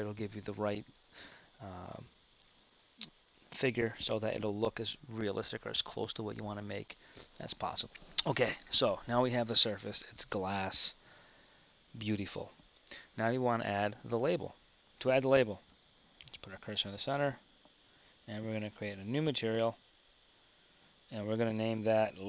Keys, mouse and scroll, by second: 14.7 shift+a, 15.6 shift+s.